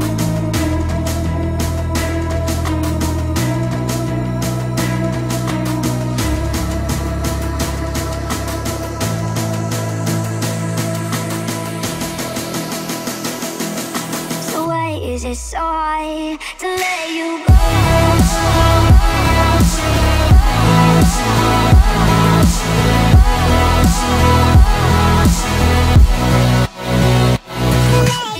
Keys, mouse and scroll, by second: 0.7 middle click, 1.1 scroll down 1, 1.4 middle click, 2.2 shift+e, 2.6 space, 2.7 scroll up 1, 3.2-5.5 shift+middle drag, 5.5 b, 7.2 click, 8.1 space, 8.2 click, 9.7 b, 10.3 click, 11.5-13.0 scroll up 1, 13.0 space, 14.2 ctrl+z, 15.1 shift+click, 17.3 b, 25.9 space, 26.1 scroll down 1, 26.4 middle click, 27.1-27.5 scroll up 1, 27.5-28.3 middle drag.